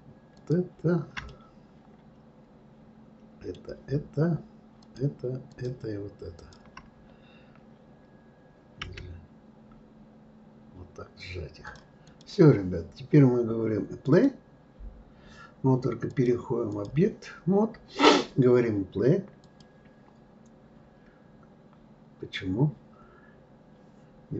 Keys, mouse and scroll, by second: 0.4 shift+click, 1.3-4.3 middle drag, 4.8 shift+click, 5.5 shift+click, 6.4 shift+click, 8.8 g, 12.0 click, 14.0-19.1 drag, 19.4 click.